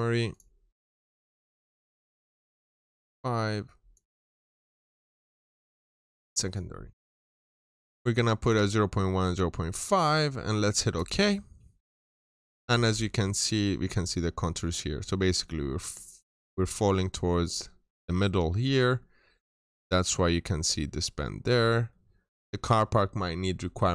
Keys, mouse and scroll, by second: 0.7-2.1 scroll down 1, 2.1 click, 4.4 scroll down 1, 5.9 click, 11.9-12.4 scroll up 1, 12.4-13.0 scroll down 2, 12.7 middle click, 13.8 middle click, 14.2 scroll up 1, 14.8 middle click, 18.3 scroll down 1, 18.5 middle click, 19.2 scroll up 1, 19.6 scroll down 1, 19.7 middle click, 21.2 scroll down 1, 21.4 middle click, 22.3-22.6 scroll up 1.